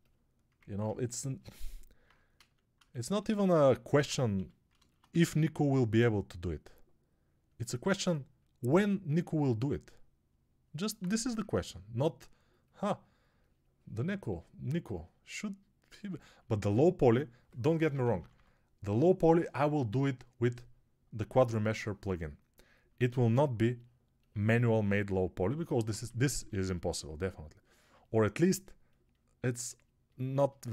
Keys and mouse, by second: 0.5 ctrl+Tab, 2.2 a, 3.4 alt+q, 4.2 g, 7.2-14.7 drag, 7.2-14.7 middle drag, 11.0 1, 18.0 [, 18.2 [, 25.9 1.